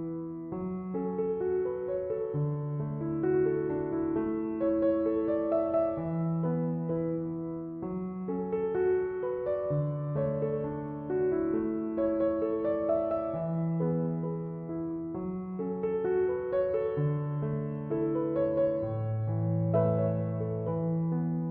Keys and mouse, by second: 1.6 click, 6.1 right click, 6.6 click, 15.6 i, 19.6 click.